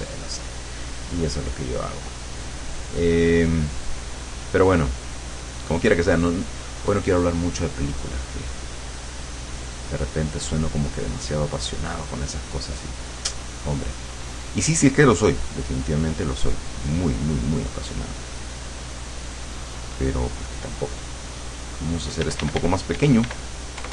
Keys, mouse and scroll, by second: 0.0 click, 2.1-6.7 drag, 6.9-11.5 drag, 13.9 middle click, 15.9-19.1 drag, 19.4 click, 22.2 d, 23.8 KP_Add.